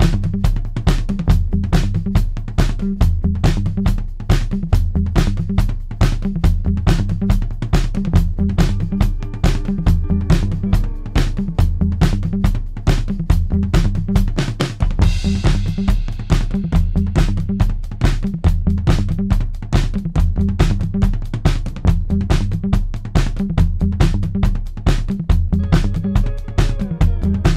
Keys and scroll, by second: 0.2 ctrl+d, 0.4 Escape, 4.6 3, 5.2 ], 5.5 Escape, 6.9 4, 16.7-19.9 typing, 21.2 4, 22.5 3, 23.4 F1, 23.5 F2, 25.2 4, 27.0 ,.